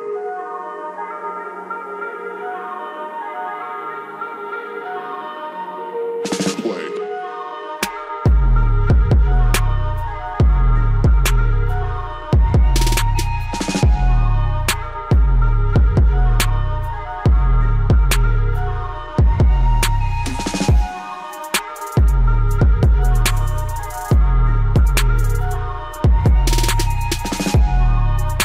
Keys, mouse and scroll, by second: 2.7 click, 3.9 typing, 5.8 right click, 6.3 click, 7.1 scroll up 1, 10.9 click, 10.9 typing, 12.6 Delete, 13.5-14.3 scroll down 1, 19.1 click, 19.3 typing, 20.2-28.4 drag.